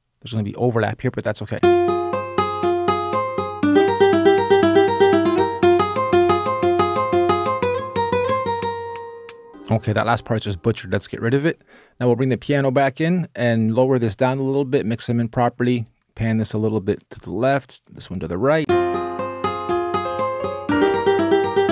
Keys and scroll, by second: 1.3 space, 9.5 BackSpace, 9.5 space, 18.4 space.